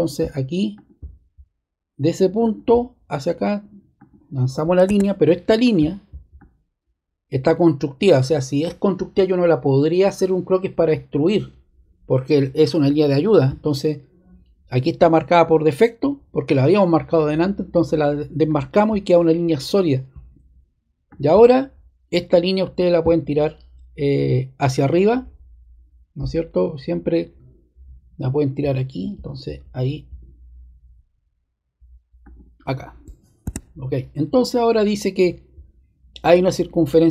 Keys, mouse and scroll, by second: 0.7-1.8 drag, 2.4-3.4 drag, 4.8 ⟲, 5.5 click, 6.3 click, 18.4 click, 21.0 click, 22.7 click, 32.2 click, 33.4 super+z.